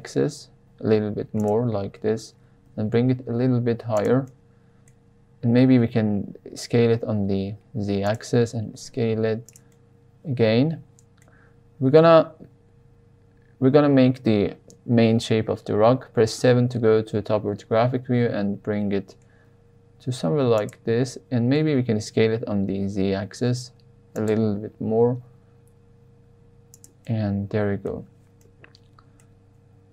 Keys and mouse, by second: 1.3 click, 2.6 g, 2.9 z, 3.9 drag, 4.3-4.8 middle drag, 5.5 s, 5.7 z, 8.0 click, 8.5 s, 9.4 click, 9.7-11.1 middle drag, 16.3 KP_7, 18.0 g, 20.5 click, 21.5 s, 21.7 x, 24.1 click, 24.5 g, 26.7 drag, 27.0-27.9 middle drag, 28.4-29.2 middle drag.